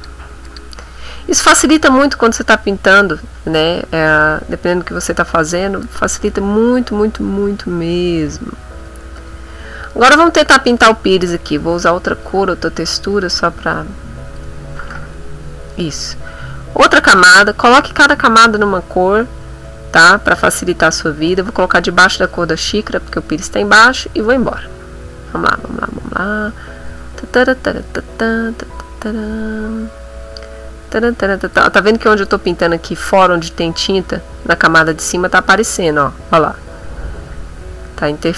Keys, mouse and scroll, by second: 0.5 click, 1.2 middle click, 5.8 click, 9.2 click, 9.9 middle click, 10.4 middle click, 11.1 shift+click, 12.1 click, 13.1 click, 13.5 click, 14.7-15.9 middle drag, 16.8 click, 21.2 click, 23.1-31.7 drag, 35.0-38.3 drag.